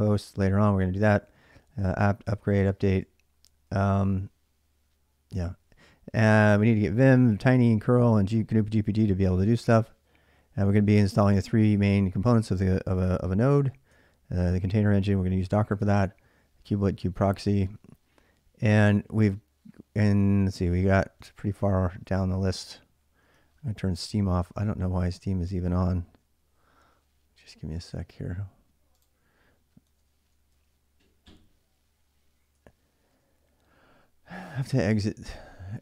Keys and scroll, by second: 0.1-3.6 typing, 5.1 j, 5.3 j, 6.4-10.9 typing, 13.7 j, 14.6 j, 16.5-17.7 typing, 19.4 j, 21.0 k, 21.2 k, 29.8-31.6 typing, 32.9 Return.